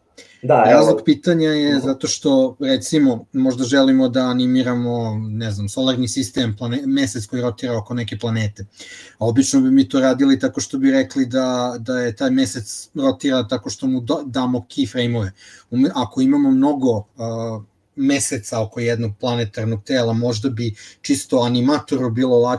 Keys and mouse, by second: 1.1-2.5 drag.